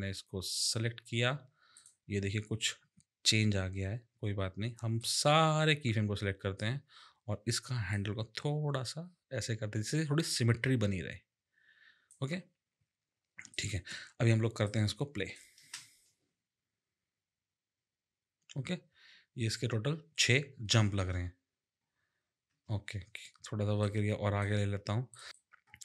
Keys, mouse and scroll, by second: 0.6 click, 1.7 click, 5.0 click, 7.9 click, 13.5 click, 14.6 click, 15.5 space, 22.5 space, 23.8 click, 25.1 click, 25.3 click.